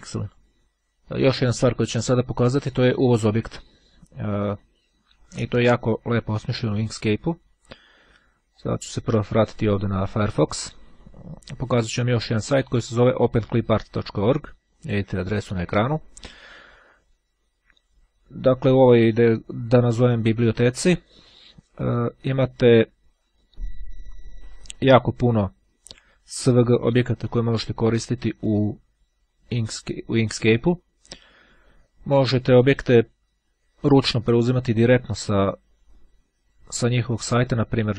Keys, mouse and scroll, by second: 0.7-1.4 scroll down 2, 7.7-9.3 drag.